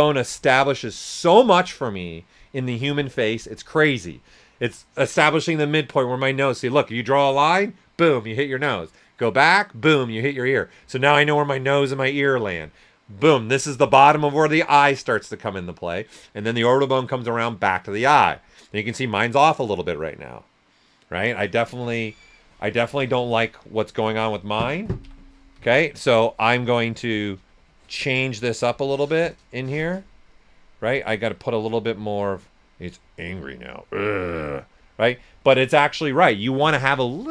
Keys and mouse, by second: 21.8 typing, 23.8 space, 25.0-26.5 typing, 26.2 ctrl+right click, 26.6-35.1 drag, 35.1 typing.